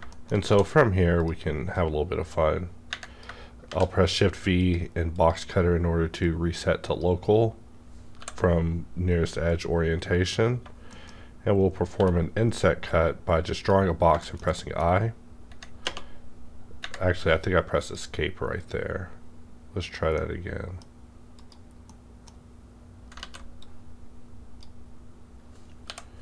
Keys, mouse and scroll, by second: 0.0 shift+scroll down 2, 0.0 shift+middle click, 0.4 d, 1.1 click, 1.7-4.5 drag, 3.7 shift+v, 5.1-10.4 drag, 8.2 i, 10.9 middle click, 11.1 scroll up 1, 12.0 b, 12.6-13.4 scroll down 1, 13.4 b, 13.5 click, 14.0-14.8 scroll down 4, 14.4 shift+middle click, 14.5 shift+middle click, 15.8 space, 17.1-20.1 drag, 20.2-21.9 middle drag, 20.2-21.4 drag, 21.9-23.6 middle drag, 23.2 ctrl+z, 23.6-26.2 drag, 25.9 i.